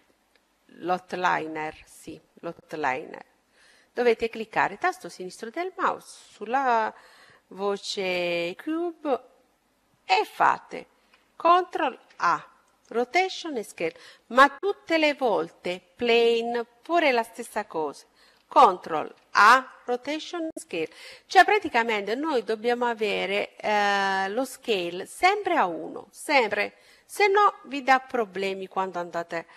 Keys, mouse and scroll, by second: 4.3-6.1 drag, 12.9 ctrl+a, 15.5-17.2 drag, 26.9-28.8 drag.